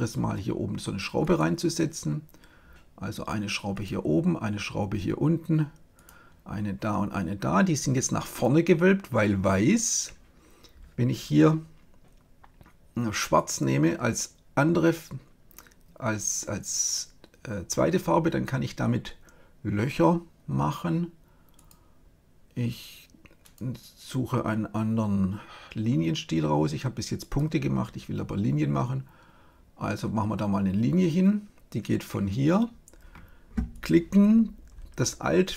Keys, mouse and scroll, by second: 1.1-3.0 drag, 3.7-5.3 drag, 5.9-7.9 drag, 8.3 click, 13.3 click, 21.5-25.1 drag, 33.7-35.3 drag.